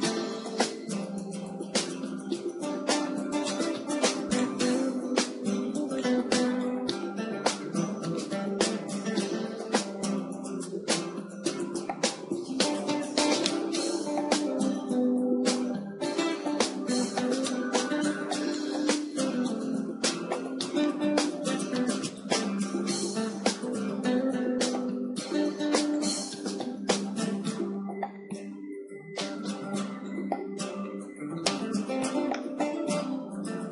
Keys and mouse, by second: 0.1-2.9 drag, 1.3 KP_1, 2.7 r, 4.5-6.5 drag, 5.3 r, 8.3-10.3 drag, 10.4 s, 13.8 click, 16.7 KP_0, 19.9 click, 21.9 KP_7, 23.7 z, 25.3 r, 28.0-29.9 drag, 29.5 g, 29.9-31.0 middle drag, 31.1-33.1 drag, 33.1-33.7 middle drag.